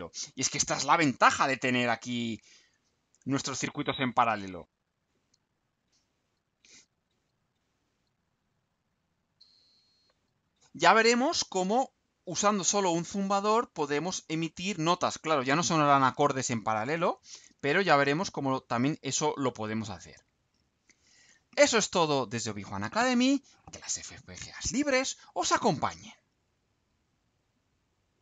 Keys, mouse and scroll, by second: 1.9 click, 10.3 click, 20.2 click, 27.1 click, 28.1 click.